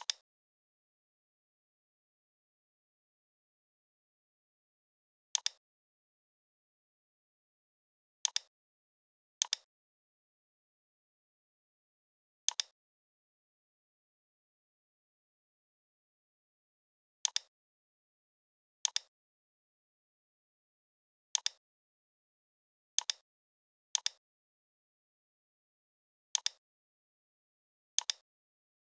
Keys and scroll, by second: 3.5 i, 7.0 a, 15.1 v, 24.4 p.